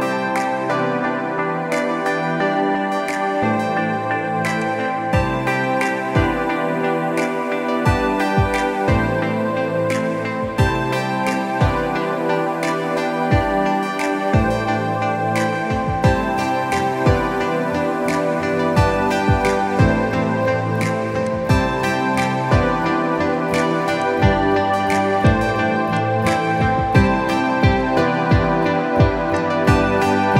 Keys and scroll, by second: 13.6 ctrl+-, 13.7 ctrl+-, 13.9 ctrl+-, 14.0 ctrl+-, 14.0 ctrl+-, 14.4 ctrl+=, 14.6 ctrl+-, 14.9 ctrl+=, 15.9 ctrl+=, 16.2 ctrl+=, 17.7 ctrl+=, 22.6 ctrl+=, 26.6 ctrl+z, 28.9 ctrl+0.